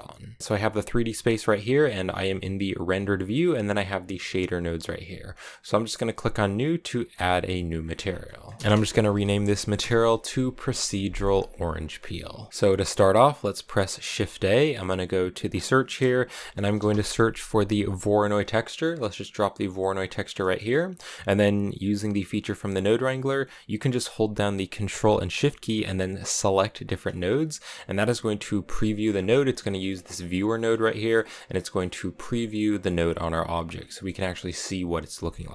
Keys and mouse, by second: 1.3 z, 2.3 z, 7.0 click, 8.1 middle click, 8.6-10.3 shift+drag, 9.0 e, 10.8 middle click, 11.9 middle click, 13.5 middle click, 14.0 shift+a, 20.3 middle click, 26.7 ctrl+shift+click, 28.9 middle click, 29.8 click, 30.3 click, 31.0 middle click, 31.6 middle click, 32.9 click, 33.9 middle click, 35.2 middle click.